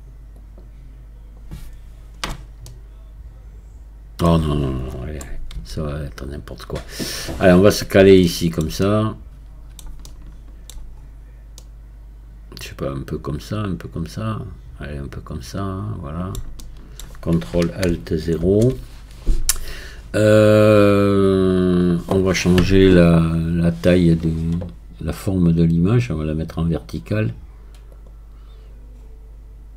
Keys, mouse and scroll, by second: 0.4-2.2 drag, 2.2-2.7 scroll up 4, 2.7-5.6 middle drag, 5.6 x, 7.5-8.3 scroll up 2, 8.3-11.0 shift+middle drag, 11.0-11.6 scroll up 4, 11.6-14.6 middle drag, 16.6-18.4 shift+middle drag, 18.4 ctrl+alt+KP_0, 25.6 scroll up 1, 26.3 scroll up 5, 27.9-28.9 drag, 28.9 scroll up 4.